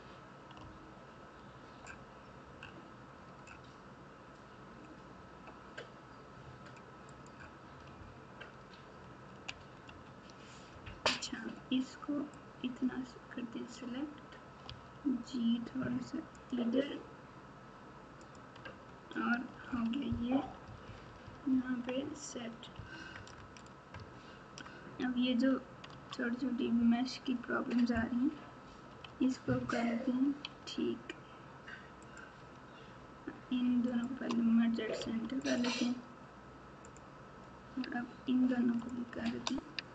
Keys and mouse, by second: 0.6 g, 9.4 ctrl+z, 9.8 ctrl+z, 12.4-13.7 drag, 14.6 g, 18.2 click, 18.6 Tab, 19.6 alt+z, 20.4 KP_4, 20.6 KP_4, 21.0 KP_4, 21.2 KP_4, 22.7 KP_6, 23.9 KP_Add, 24.4 KP_Add, 24.5 KP_Add, 24.5 KP_Add, 25.9 Tab, 29.0 alt+z, 30.4 alt+z, 32.0 click, 33.9 shift+click, 35.0 m, 36.8 click, 38.7 shift+click.